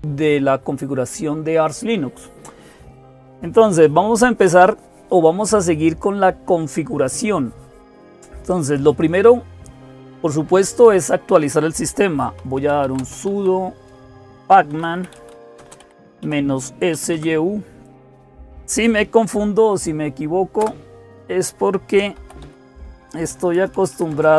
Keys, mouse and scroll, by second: 0.0-24.3 typing, 20.4 Return.